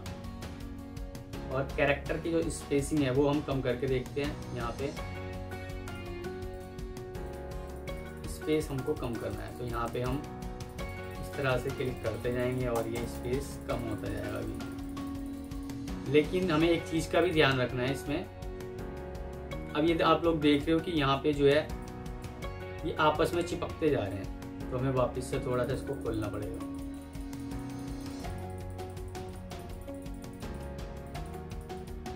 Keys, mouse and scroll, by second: 7.5 double click, 21.3 F2, 22.4 Escape, 25.6 double click.